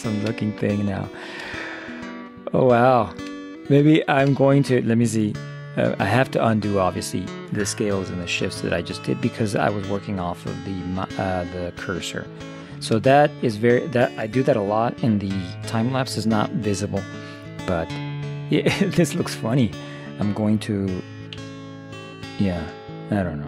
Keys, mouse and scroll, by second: 2.6-5.2 middle drag, 6.2 Tab, 12.5-13.5 middle drag, 21.4 a.